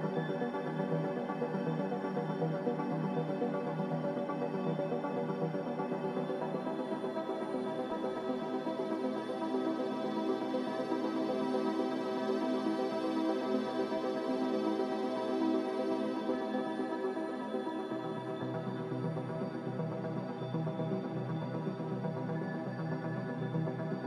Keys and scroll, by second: 6.1-6.9 typing.